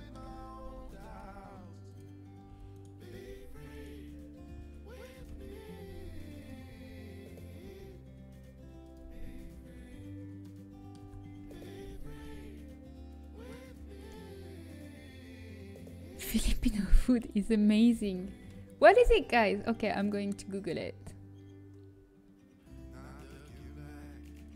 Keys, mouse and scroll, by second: 1.6 g, 2.4 e, 3.3 s, 3.6-8.5 drag, 4.8 s, 5.7 g, 7.2 s, 7.5 e, 9.6 z, 11.2 Tab, 12.2 z.